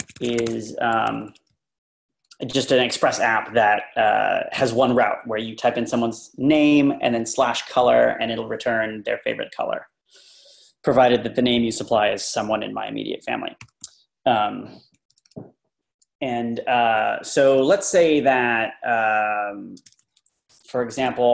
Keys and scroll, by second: 0.0-2.4 typing, 3.5 typing, 13.6 Up, 13.8 typing, 14.9 Right, 15.1 Right, 15.2 Right, 19.9 Right, 20.1 Right, 21.1 Left.